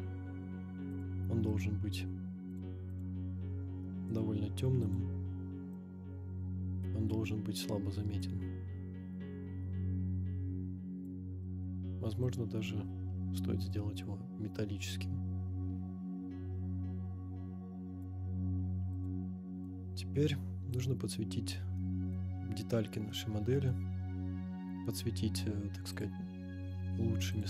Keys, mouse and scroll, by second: 0.9-1.6 drag, 2.5 click, 2.9 drag, 3.8-4.2 middle drag, 4.8 click, 8.2-11.2 drag, 11.4 middle click, 12.2-13.9 drag, 14.9-18.1 drag, 18.9 click, 19.5 middle click, 19.5 scroll up 2, 21.0 click, 21.5 scroll up 2, 21.8-22.1 middle drag, 22.4-23.1 scroll up 1, 23.1-23.7 middle drag, 25.9 click, 27.3 click.